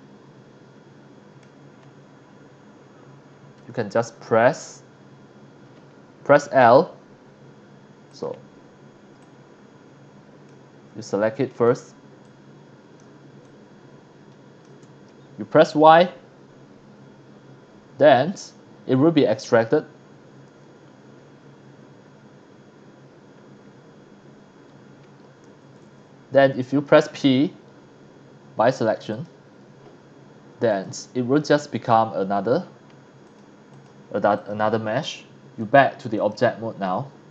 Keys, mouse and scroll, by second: 0.1-1.4 middle drag, 3.1 scroll up 1, 3.5 scroll down 1, 6.4 l, 7.6 scroll down 1, 8.1 click, 8.6 scroll up 1, 9.2-10.5 drag, 10.8-11.2 scroll up 2, 12.2 shift+click, 13.4-14.6 shift+drag, 17.3 scroll down 1, 20.9-21.3 scroll up 4, 21.3-22.1 scroll down 3, 23.4-23.7 scroll up 2, 26.7 9, 29.1 click, 30.7 click, 33.3 click, 33.7 click, 34.3 click, 35.6 click, 36.2 click, 36.7 scroll down 1, 36.9-37.2 scroll up 2.